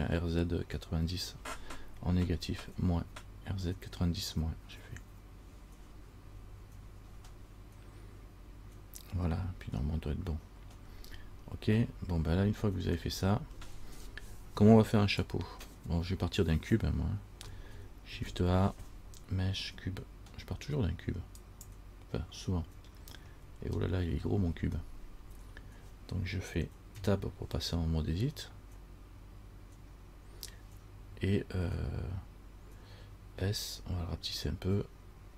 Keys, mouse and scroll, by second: 18.3 shift+a, 23.1-25.4 scroll down 7, 27.1 Tab, 33.5 s.